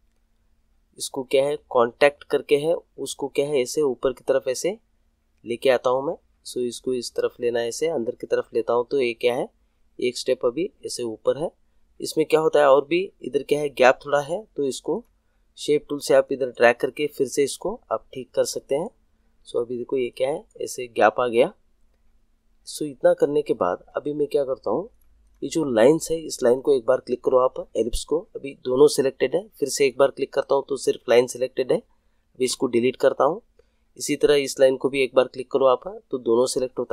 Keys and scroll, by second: 32.4 Delete.